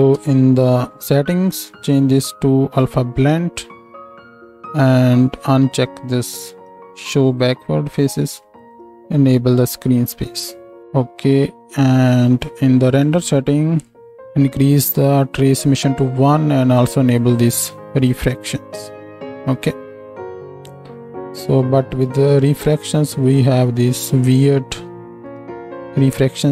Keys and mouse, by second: 0.1 n, 1.8-7.4 middle drag, 7.4-8.6 drag, 8.6 middle click, 8.8-11.8 drag, 10.8-18.3 middle drag, 10.8-11.8 right drag, 10.8 n, 18.3-26.5 drag.